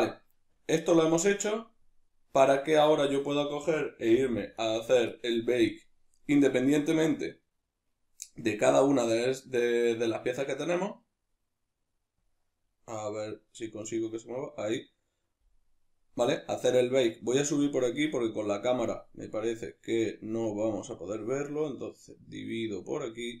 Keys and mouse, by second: 3.3 right click, 4.1 g, 4.7 right click, 6.3 click, 13.3-19.2 drag, 19.2-21.0 middle drag, 21.0-23.4 drag.